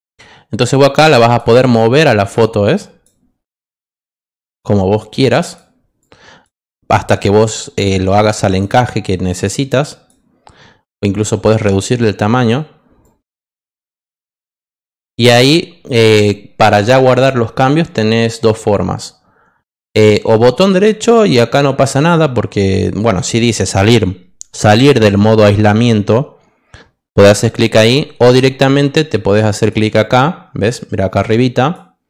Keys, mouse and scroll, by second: 1.1 click, 2.0 click, 2.7 click, 3.6 click, 5.1 click, 6.0 click, 7.4 click, 8.2 click, 9.0 click, 9.8 click, 11.6 click, 13.0 click, 20.1 right click.